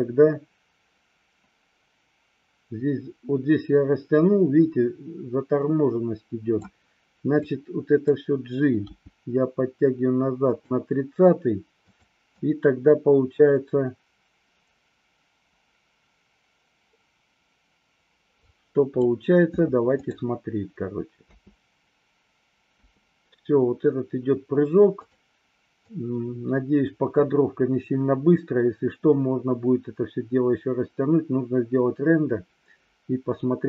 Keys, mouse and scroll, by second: 7.5-8.1 drag, 8.9 g, 10.5 click, 12.0 click, 12.4-19.1 drag, 21.4 space, 22.9 space, 25.1 click, 26.0-33.6 drag.